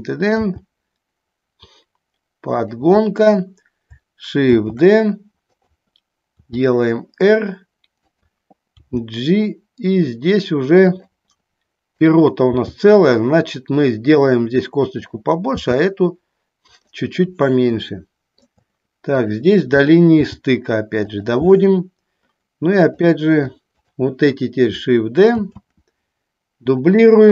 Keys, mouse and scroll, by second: 0.0 click, 0.5 g, 2.7 click, 4.6 shift+d, 6.6 r, 8.3 click, 9.0 g, 11.1 click, 12.1 click, 12.6 g, 14.3 click, 16.9 click, 18.1 shift+middle click, 20.4 g, 21.2 click, 23.0 click, 24.0 shift+click, 25.6 shift+d, 27.0 click.